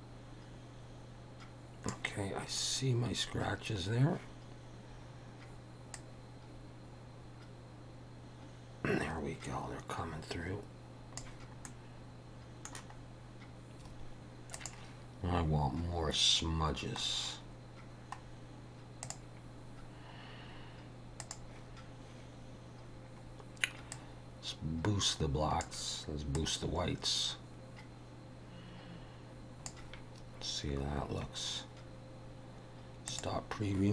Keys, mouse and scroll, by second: 2.7 scroll up 2, 3.4 scroll down 2, 6.1 click, 11.7 middle click, 13.1 scroll down 1, 13.9 scroll up 10, 14.6 click, 15.5-16.0 scroll down 3, 17.1 scroll down 2, 18.3 scroll down 1, 19.1 click, 19.8 scroll down 3, 20.5 scroll down 2, 21.3 click, 23.9 click, 26.3 click, 33.1 click.